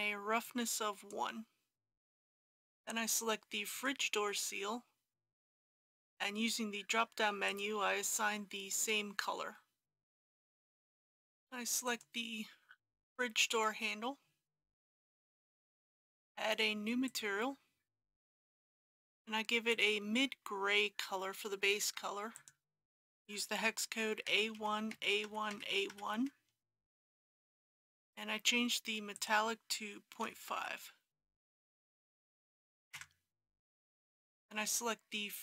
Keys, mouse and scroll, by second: 0.4-1.9 drag, 2.4 alt+a, 3.7 click, 19.7-20.8 drag, 24.3 a, 24.5 KP_1, 25.5 KP_1, 29.1 click, 30.2 KP_Decimal, 30.6 KP_5.